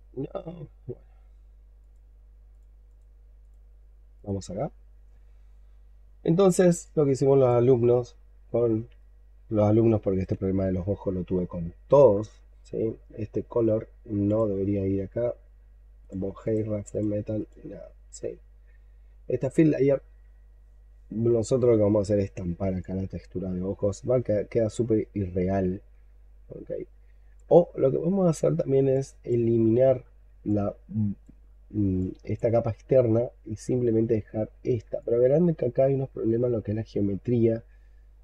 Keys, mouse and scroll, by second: 2.8 double click, 5.9-6.7 scroll down 11, 6.7 alt+click, 7.7 alt+middle click, 8.3-8.8 alt+scroll up 1, 8.9 shift+right click, 12.0-12.7 scroll up 7, 13.0-16.0 scroll down 2, 16.3 double click, 16.8 double click, 17.2 double click, 22.1-22.6 scroll up 2, 22.7 alt+click, 27.5-28.0 scroll up 2, 28.0-28.7 scroll down 4, 28.8 alt+click, 29.4-30.2 alt+scroll up 6, 30.3 alt+click, 31.3-31.9 alt+scroll up 4, 31.9 alt+click, 33.2 scroll up 2, 34.3-34.8 scroll up 5, 34.9 alt+click.